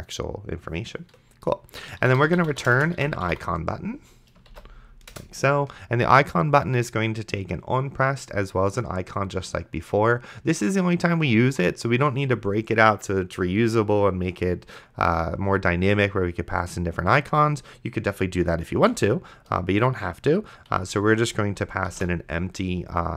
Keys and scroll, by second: 1.9-4.8 typing, 5.1 Return, 19.0 shift+9, 19.4 0, 20.7 Delete, 22.2 shift+[.